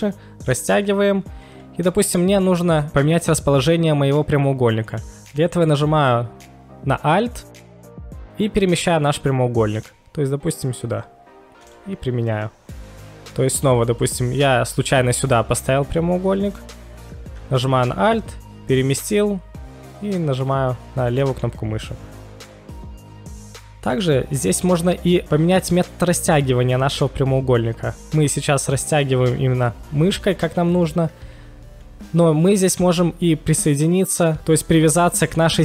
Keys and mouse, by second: 11.6 click, 14.0 click, 21.2 click, 23.9 click.